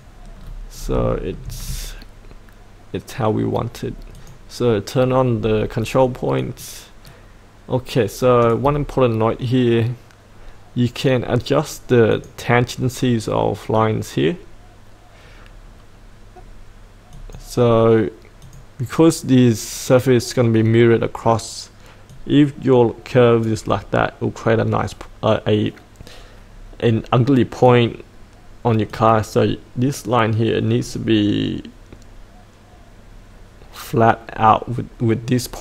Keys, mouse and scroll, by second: 0.4-0.9 scroll down 1, 1.1 shift+middle click, 4.2 click, 5.3-6.4 scroll down 1, 6.4-9.3 drag, 16.0-17.1 scroll up 1, 17.1-19.5 drag, 22.5-31.6 drag.